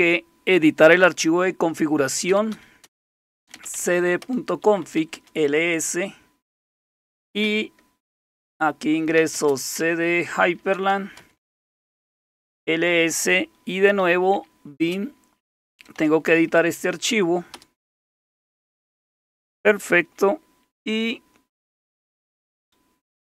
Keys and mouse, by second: 2.0-5.4 typing, 7.2-7.9 typing, 9.2-12.1 typing, 13.7-16.0 typing, 17.5 typing.